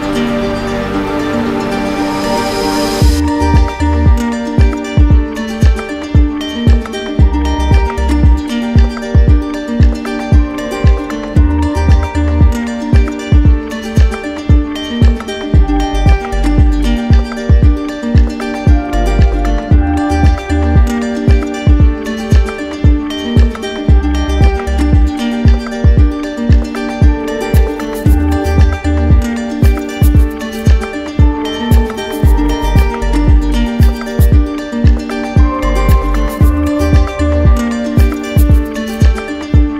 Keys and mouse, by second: 0.0-0.6 typing, 1.8 z, 4.0-5.0 right drag, 5.4-6.5 drag, 13.9 click, 15.8 click, 16.6 right click, 17.8 click, 19.8-20.9 right drag, 21.5-22.6 drag, 25.9-27.0 drag, 27.1-28.2 drag, 33.0 click, 34.4 right click, 37.6 click.